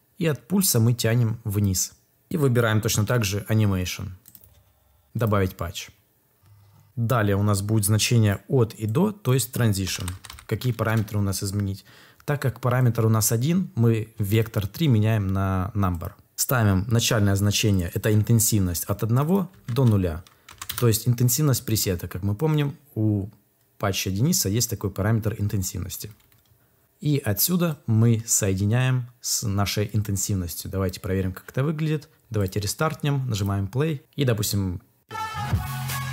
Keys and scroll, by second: 9.5-10.7 typing, 10.7 Return, 18.6 Up, 19.4 Down, 19.6 ', 20.4 BackSpace, 20.5 Return.